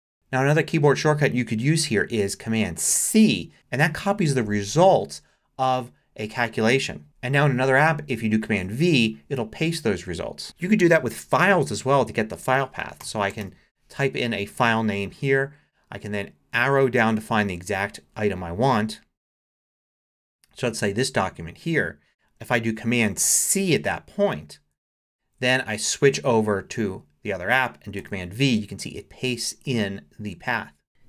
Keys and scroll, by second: 3.0 super+c, 8.5 super+v, 12.8-13.9 typing, 19.6 Down, 23.2 super+c, 26.0 super+Tab, 28.0 super+v.